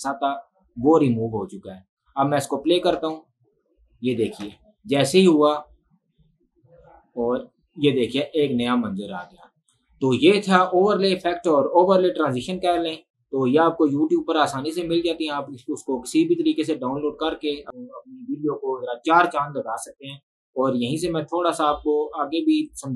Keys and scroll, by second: 3.0 space, 4.5 space.